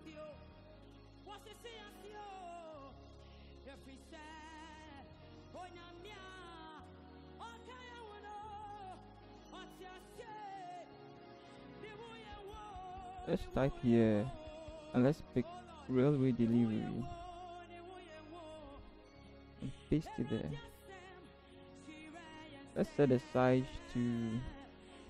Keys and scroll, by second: 0.0 Right, 0.0 Up, 0.2 ctrl+j, 1.9 ctrl+0, 5.1 ctrl+g, 6.6-10.9 typing, 12.6 t, 17.7 ctrl+c, 19.4 ctrl+v.